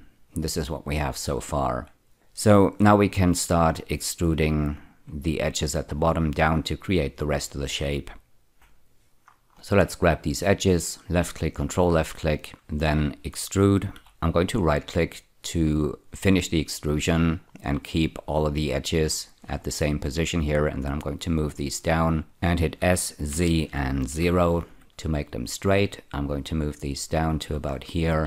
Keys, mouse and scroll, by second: 8.5 z, 9.2 scroll up 2, 9.5 click, 11.4 ctrl+click, 13.9 4, 14.3 right click, 20.9-22.3 drag, 22.7 s, 23.3 z, 24.0 0, 24.8 click, 24.9-27.4 drag, 27.7-28.2 scroll up 3.